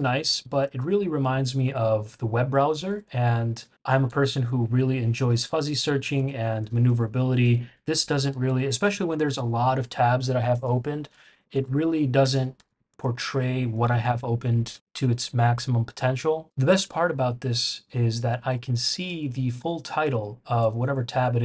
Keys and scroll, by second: 2.8 shift+super+[, 3.6 shift+super+], 4.0 shift+super+], 5.3 shift+super+[, 5.4 shift+super+[, 6.0 shift+super+], 6.1 shift+super+], 6.8 shift+super+[, 7.4 shift+super+[, 7.7 shift+super+], 8.0 shift+super+[, 8.3 shift+super+], 8.4 shift+super+], 8.7 shift+super+[, 11.1 shift+super+], 11.5 shift+super+[, 11.8 shift+super+[, 12.2 shift+super+], 12.5 shift+super+], 16.9 shift+super+], 17.7 shift+super+[, 18.4 shift+super+[, 19.0 shift+super+], 20.1 shift+super+].